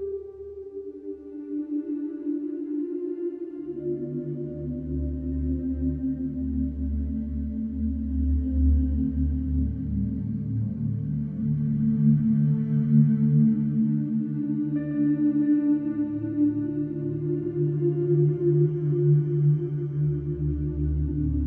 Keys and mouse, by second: 0.4 Tab, 2.3 Tab, 3.0 s, 3.1 x, 5.4 ctrl+a, 7.0 Tab, 9.8 ctrl+b, 11.9 Tab, 12.2 middle click, 15.8 middle drag, 19.2 shift+a.